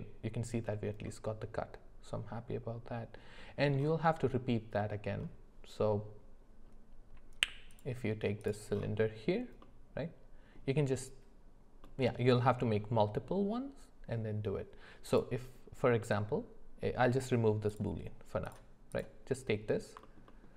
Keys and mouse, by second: 1.0-3.2 middle drag, 4.8 middle click, 7.7 click, 9.6 middle click, 11.8 middle click, 15.1 click, 17.7 click, 18.4 click, 20.0 alt+middle click, 20.3 alt+middle click.